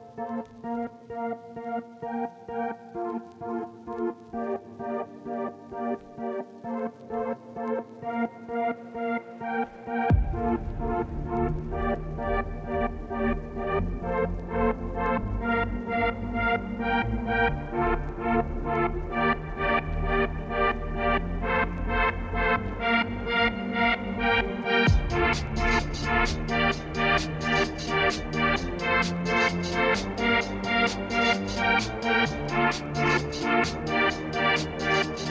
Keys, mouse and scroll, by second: 0.8-1.8 middle drag, 1.8 Tab, 2.3 KP_0, 2.8 z, 3.9 click, 5.4 click, 6.2 click, 9.3 click, 9.9 click, 10.6 click, 10.8 click, 10.9 click, 11.3 h, 12.3 ctrl+s, 15.7 z, 15.9 middle click, 16.6 click, 17.0 middle click, 17.3 click, 17.7 click, 18.6 middle click, 19.1 scroll up 4, 19.5 middle click, 20.2 click, 20.5 click, 20.9 Tab, 21.4 Tab, 22.2 click, 22.4 click, 23.6 middle click, 23.7 click, 24.1 h, 24.4 click, 24.7-25.7 middle drag, 25.7 alt+h, 26.3 Tab, 26.6 middle click, 27.0 Tab, 27.2-29.0 middle drag, 29.0 click, 29.2 click, 29.9 click, 30.3-31.5 middle drag, 31.8 KP_0, 32.2 z, 34.2-34.7 scroll up 1, 34.7 ctrl+s, 35.0 click.